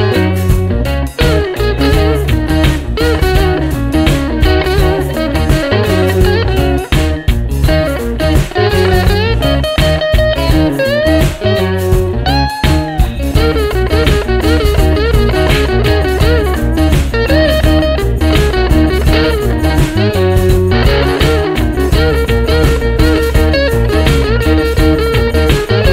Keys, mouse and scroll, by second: 2.9 click, 4.9-6.9 drag, 7.6 click, 10.0-11.0 drag, 12.0 ctrl+d, 13.5 click, 14.5-18.5 drag, 19.7 click, 21.3 click, 22.3-24.4 drag, 25.1-25.9 drag.